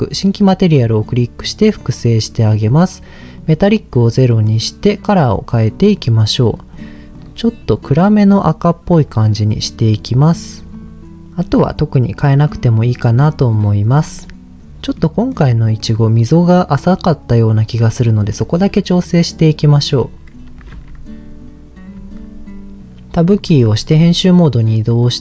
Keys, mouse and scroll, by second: 1.0 click, 3.4 click, 4.3 middle click, 5.8 click, 6.7 click, 7.1 click, 9.5 click, 9.9 click, 10.7 click, 11.2 scroll down 2, 11.6 middle click, 15.0 middle click, 15.9-17.0 middle drag, 17.7 middle click, 21.2 Tab, 22.0 Tab, 23.3 Tab, 24.2 middle click.